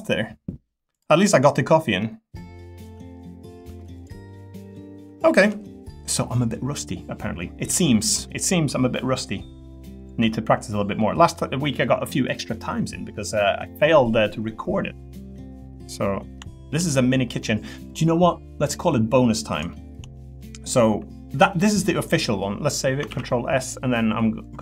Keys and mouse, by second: 2.0 middle click, 2.7 middle click, 3.6 Tab, 3.9 click, 4.3 middle click, 5.2 shift+middle click, 8.7-9.7 middle drag, 9.9 click, 10.2 Tab, 15.6 middle click, 16.5 shift+middle click, 19.7 shift+middle click, 20.1 middle click, 23.1 ctrl+s, 23.6-24.6 drag.